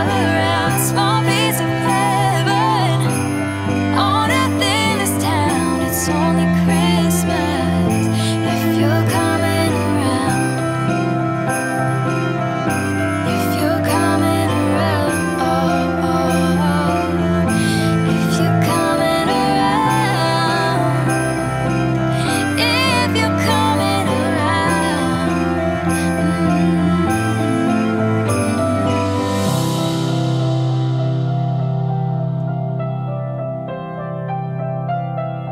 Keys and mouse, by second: 0.0 click, 0.6 KP_0, 4.8 click, 6.0-8.4 drag, 9.1 click, 9.7 KP_0, 12.0 g, 12.2 z, 21.9 shift+middle click, 23.0 click.